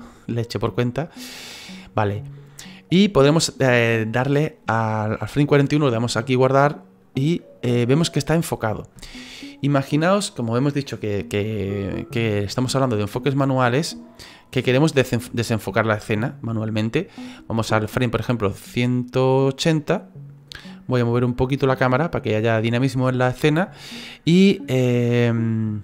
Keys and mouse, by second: 20.9 middle click.